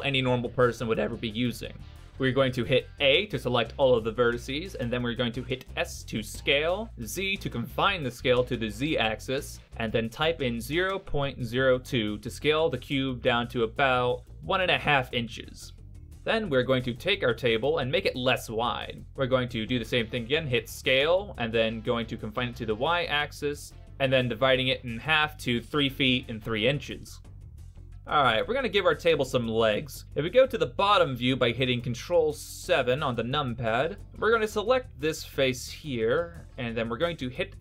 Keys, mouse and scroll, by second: 0.2 scroll up 2, 1.9 middle click, 2.4 Tab, 3.7 a, 5.7 s, 12.4-13.5 scroll up 5, 13.5 middle click, 16.2 scroll down 3, 17.5 middle click, 17.5 s, 26.5-27.0 scroll up 2, 27.3 middle click, 32.4 ctrl+KP_7, 34.0 click, 34.0 right click.